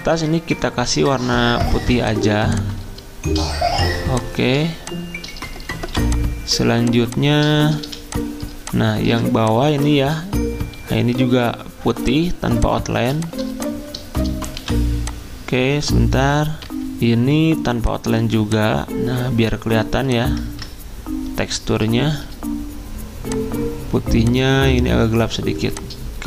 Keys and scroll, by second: 0.8 d, 5.9 v, 9.9 ctrl+z, 15.5 ctrl+z, 15.5 d, 15.5 v, 16.6 F10, 20.5 ctrl+z.